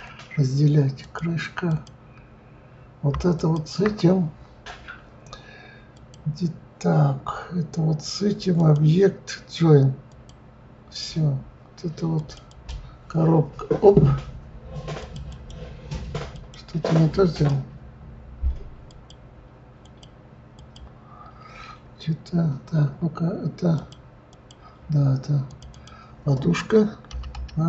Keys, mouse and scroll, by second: 1.6 click, 3.3 shift+click, 5.9-11.6 drag, 12.1 click, 12.5-15.1 drag, 15.3-17.4 drag, 18.9 click, 19.8 click, 20.5 click, 23.7 click, 24.3 click, 25.4 click, 25.7-27.6 drag.